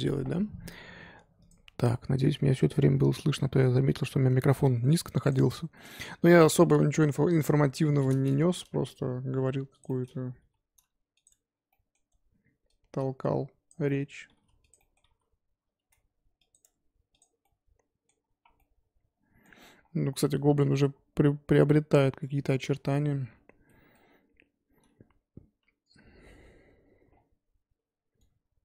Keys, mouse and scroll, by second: 5.7-7.0 middle drag, 7.0 click, 8.8 g, 9.9 middle click, 10.4 g, 11.3 Tab, 11.7 middle click, 12.1 Tab, 13.7 click, 14.3 g, 16.6 Tab, 17.2 click, 17.4-24.1 middle drag, 24.1-25.2 scroll up 1.